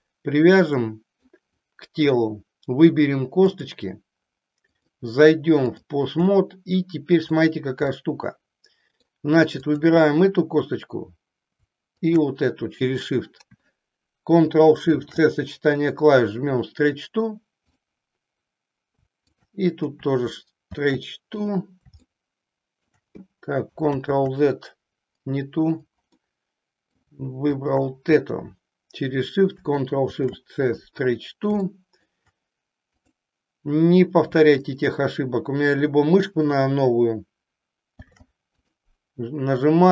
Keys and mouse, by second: 0.9 middle click, 4.6 click, 6.5-7.5 middle drag, 7.9-9.1 middle drag, 9.6 click, 11.9 shift+click, 14.9 ctrl+shift+c, 20.6 ctrl+shift+c, 22.0 middle click, 24.1 ctrl+z, 26.1-27.1 middle drag, 27.5 shift+click, 30.0 ctrl+shift+c, 31.6 middle click, 33.0 click, 37.9 ctrl+shift+c.